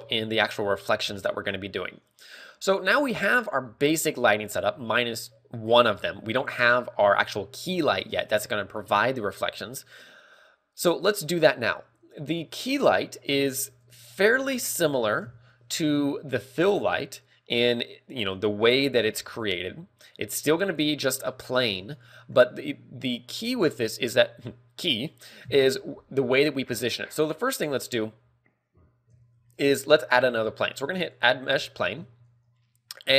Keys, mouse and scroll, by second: 3.9 a, 4.3 scroll up 2, 4.8 ctrl+w, 4.8 scroll up 1, 6.2 ctrl+w, 6.2 scroll down 4, 7.4 scroll up 1, 8.3 scroll up 2, 25.8 KP_7, 25.9 KP_7, 29.7 shift+a, 32.7 KP_1.